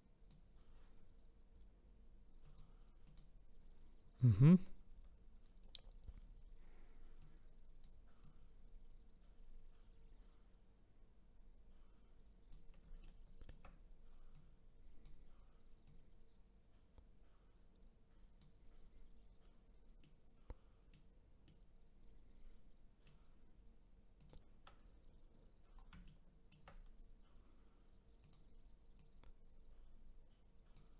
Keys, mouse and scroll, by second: 2.4 click, 3.0 click, 7.2 click, 8.2 click, 13.0-14.3 shift+middle drag, 14.3 click, 15.8-20.0 drag, 20.0-24.2 middle drag, 24.2 click, 26.0-28.2 shift+middle drag, 28.2 click, 29.0 click.